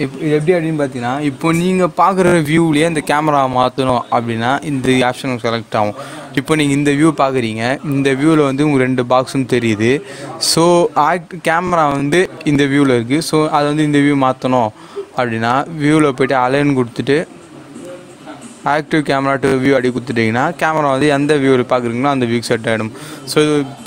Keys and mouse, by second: 11.9 click, 15.4 click, 19.8 click.